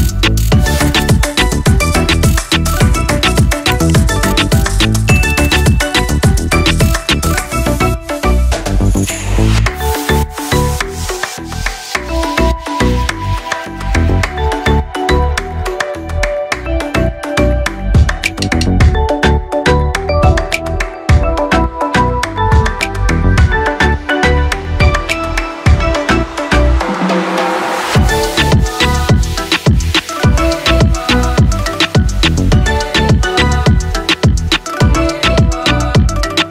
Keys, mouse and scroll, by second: 3.3 ctrl+shift+a, 4.5-7.6 drag, 8.1 ctrl+shift+a, 8.9-12.0 drag, 12.5 ctrl+shift+a, 13.4-20.7 drag, 22.1 ctrl+shift+a, 23.1-27.0 drag, 30.0 ctrl+shift+l, 31.4 ctrl+z, 33.0 click, 34.7-35.7 scroll up 1, 35.7-36.5 drag.